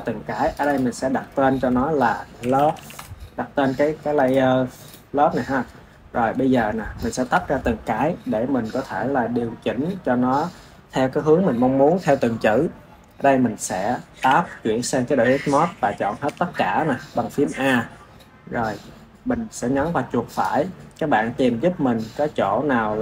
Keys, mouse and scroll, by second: 0.4 click, 0.6-3.7 drag, 4.2 click, 4.7-6.0 drag, 6.0-6.9 scroll down 1, 6.9-10.0 shift+middle drag, 14.2 Tab, 16.2 a, 20.2-23.0 right drag.